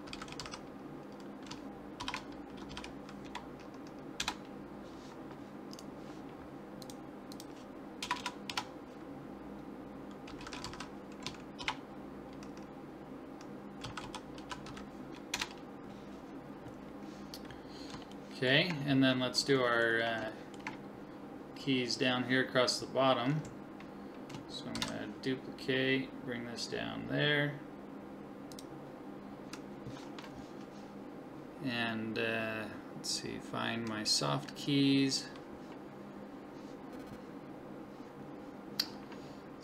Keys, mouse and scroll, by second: 2.4 BackSpace, 5.7 right click, 6.8 click, 7.7 click, 8.2 BackSpace, 17.7 middle click, 24.8 shift+d.